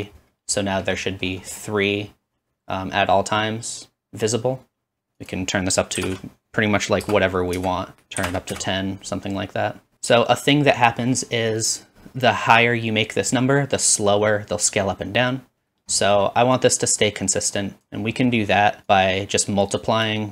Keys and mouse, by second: 7.5-9.4 drag, 9.8-20.3 drag.